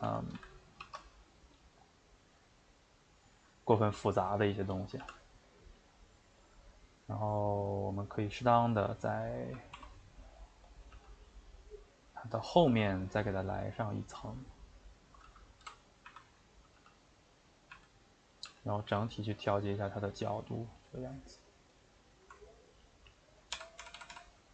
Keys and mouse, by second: 0.2 Tab, 0.3 a, 0.8 shift+d, 3.6 shift+middle click, 4.0 s, 9.7 s, 12.2 middle click, 12.7 g, 13.5-15.6 middle drag, 15.6-18.4 typing, 16.3 middle click, 21.7 click, 21.9 middle click, 22.8 ctrl+right click, 23.5-24.5 typing.